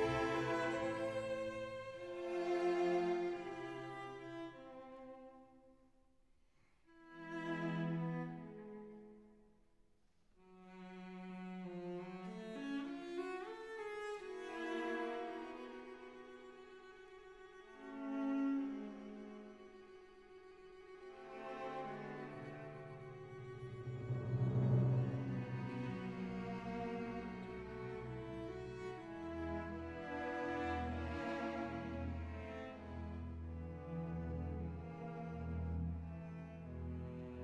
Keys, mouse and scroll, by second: 1.6 click, 3.7 3, 5.0 alt+shift+click, 6.3 shift+click, 6.7 shift+click, 7.6 shift+click, 8.2 shift+click, 9.5 right click, 9.5 e, 10.9 s, 11.2 y, 13.1 click, 14.3 click, 16.5 KP_Decimal, 17.6 shift+click, 18.2 shift+click, 18.8 shift+click, 19.3 shift+click, 23.0 shift+click, 23.4 shift+click, 25.4 Delete, 31.1 click, 31.4-32.3 drag, 33.3-35.1 drag, 36.9 click, 37.3 click.